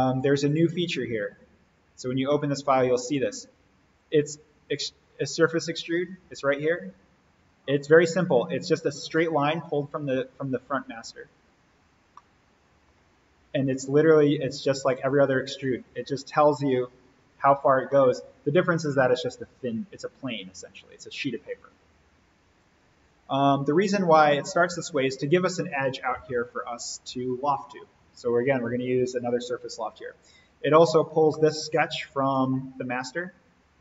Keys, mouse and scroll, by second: 0.3 click, 1.2 scroll up 1, 1.6 click, 2.0-2.4 scroll down 1, 2.4-2.9 middle drag, 3.8 click, 9.7 click, 11.7-12.2 scroll down 1, 12.2-13.2 middle drag, 13.6 click, 17.8-21.7 middle drag, 22.5 click, 23.9-24.2 scroll up 1, 24.2-25.2 middle drag, 26.0 click, 30.5 click, 31.3-32.3 middle drag.